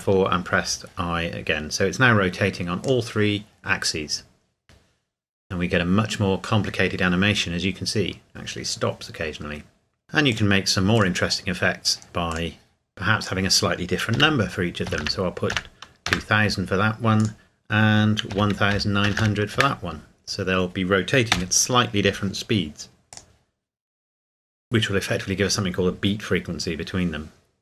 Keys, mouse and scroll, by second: 2.8 click, 10.3 click, 14.1 KP_2, 14.9 KP_0, 16.1 KP_Enter, 17.2 click, 18.3 KP_1, 18.7 KP_9, 19.1 KP_0, 19.5 KP_Enter, 21.3 i, 23.1 click.